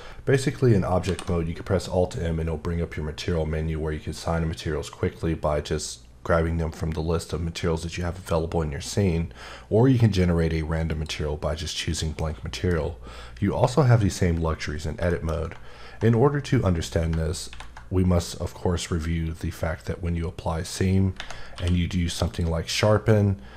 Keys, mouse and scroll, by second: 1.1 alt+m, 11.1 click, 12.2 middle click, 14.6 scroll up 1, 15.1 shift+middle click, 21.5 q, 22.2 click.